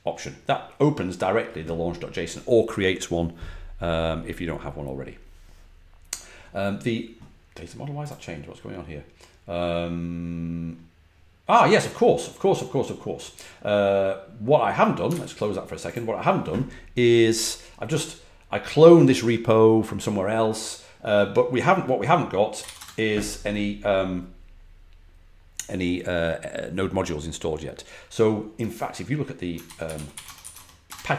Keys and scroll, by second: 15.0 super+q, 22.3-23.1 typing, 29.5-30.9 typing.